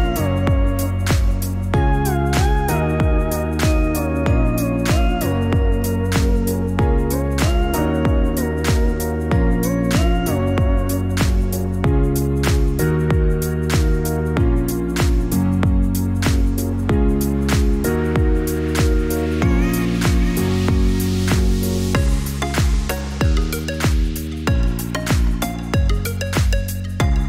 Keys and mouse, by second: 0.0 alt+shift+click, 0.5-1.7 middle drag, 3.6 click, 7.1 click, 10.9-13.7 drag, 20.9-25.3 drag.